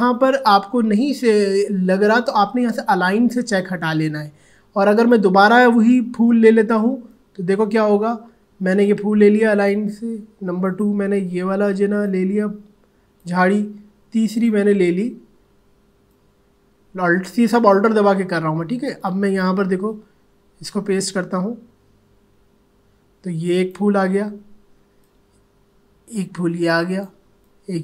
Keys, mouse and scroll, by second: 4.9 click, 5.8 click, 7.1-10.6 alt+drag, 12.1-14.3 alt+drag, 16.2-27.8 alt+drag.